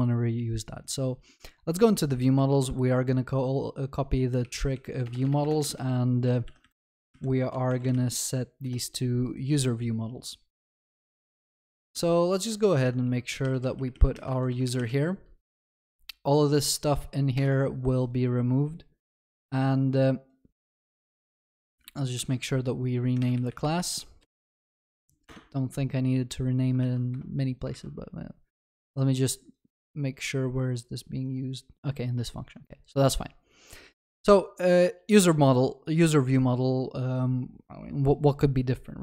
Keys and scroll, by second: 2.4 ctrl+c, 12.4 Return, 14.3 ctrl+c, 14.3 ctrl+w, 21.9 shift+F6, 26.9 ctrl+s.